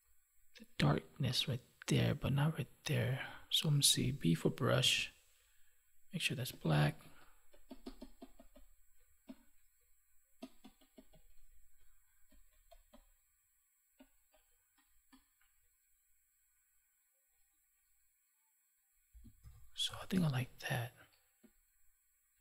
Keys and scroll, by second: 19.3 ctrl+s, 20.1 space.